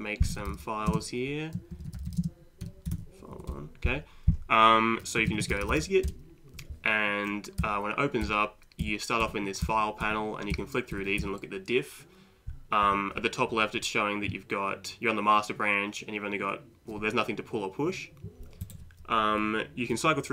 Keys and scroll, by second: 0.0-3.5 typing, 5.0-6.3 typing, 7.6 Page_Down, 8.2 Up, 8.8 Down, 9.2 Up, 9.7 Down, 10.0 Up, 10.5 Down, 10.9 Up, 11.2 Down, 12.8 Up.